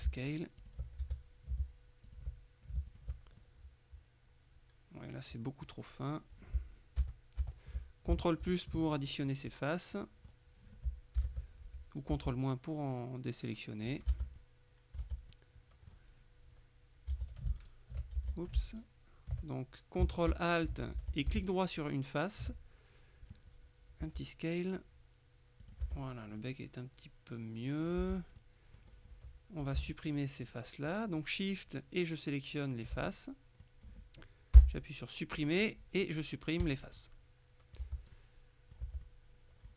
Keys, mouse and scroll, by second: 0.0 ctrl+click, 0.7 ctrl+click, 1.1 ctrl+s, 2.2 click, 3.0 click, 6.1-6.6 scroll up 1, 7.1 ctrl+KP_Add, 8.5 t, 10.0 click, 11.2 ctrl+KP_Subtract, 12.2 s, 14.0 click, 14.2 Tab, 15.1 Tab, 15.4 middle click, 17.2 a, 17.7 alt+shift+right click, 18.3 alt+shift+a, 18.8 alt+shift+right click, 21.0 alt+shift+a, 21.5 alt+shift+right click, 24.1 s, 25.7 click, 25.9 Tab, 26.2 scroll down 1, 26.4 middle click, 28.0 Tab, 28.4 middle click, 29.0-29.5 scroll up 1, 29.7 shift+right click, 33.2-34.2 middle drag, 34.6 Delete, 36.7 click, 37.9 Tab, 38.2 middle click, 38.9 Tab, 39.1 middle click.